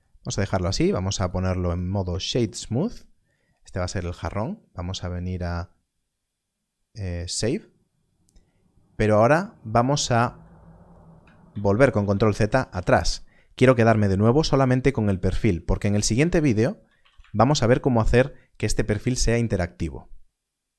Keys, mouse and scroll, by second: 1.1 right click, 1.6 click, 2.7-4.1 scroll up 1, 4.1 click, 7.1 click, 11.4 ctrl+z, 11.6 ctrl+z, 11.8 ctrl+z, 12.0 ctrl+z, 12.2 ctrl+z, 12.4 ctrl+z, 12.6 ctrl+z, 12.7 ctrl+z, 16.1 Tab, 16.9 alt+a.